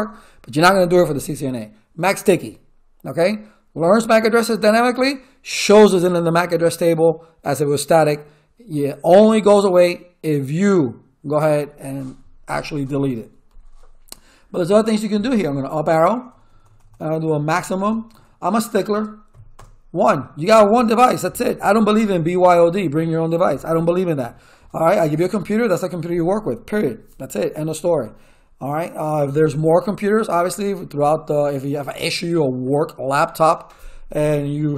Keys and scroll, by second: 15.1 Up, 16.2 BackSpace, 18.1 x, 18.9 space, 19.3 1, 19.5 Return.